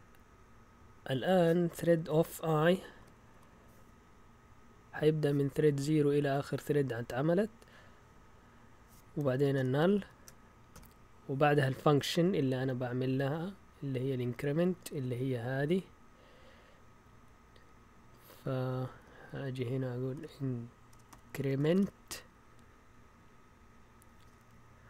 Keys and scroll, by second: 2.1 Left, 2.2 Left, 2.3 Left, 2.7 Right, 3.0 i, 3.1 Right, 3.3 Right, 9.2-10.7 typing, 12.5-15.4 typing, 18.5 typing, 19.0 Right, 19.4 Left, 19.9-22.3 typing.